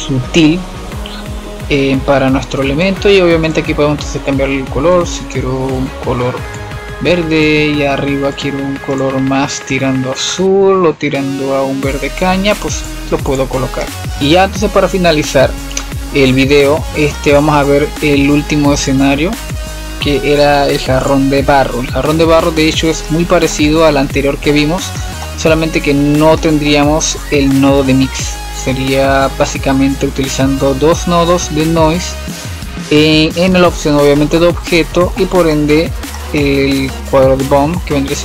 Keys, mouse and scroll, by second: 3.4 click, 8.2-8.8 drag, 13.2-13.5 drag, 13.7-14.1 middle drag, 14.1-16.8 scroll up 2, 17.1-18.7 middle drag, 18.7 click, 21.1 click, 22.6 scroll down 2, 23.1-25.9 middle drag, 25.9 scroll up 2, 26.3-26.7 middle drag, 26.7 scroll up 1, 27.0 drag, 28.6-29.0 scroll up 5, 29.6-32.8 shift+middle drag, 32.8-34.1 scroll down 3, 34.1-36.9 middle drag, 36.9 click.